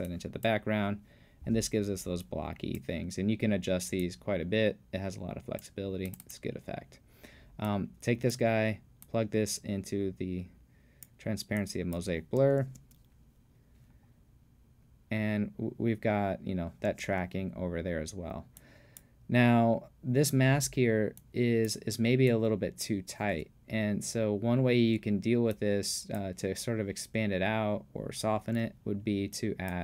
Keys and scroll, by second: 12.6 space, 16.9 space.